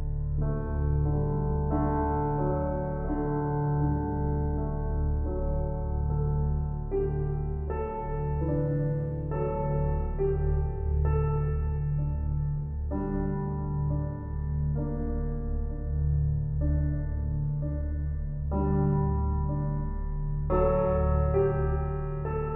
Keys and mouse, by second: 3.3 ctrl+alt+click, 3.8 alt+shift+click, 5.5 click, 6.9 ctrl+alt+click, 7.6-9.9 alt+shift+drag, 9.9 ctrl+s, 10.4-12.4 ctrl+alt+drag, 12.1 Tab, 12.4 typing, 12.5-14.8 ctrl+alt+drag, 14.8 typing, 15.1-16.9 drag, 17.2 shift+s, 17.9-18.9 drag, 18.9 Tab, 20.0-22.5 drag, 20.1 typing.